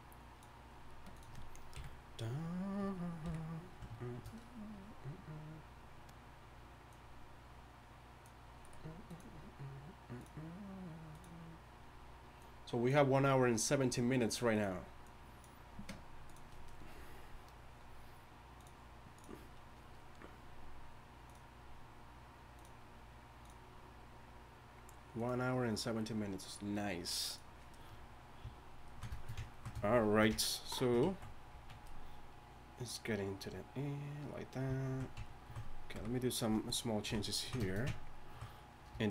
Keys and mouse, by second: 1.7 KP_1, 3.2 KP_1, 31.0 z, 31.5 z, 35.9 KP_1.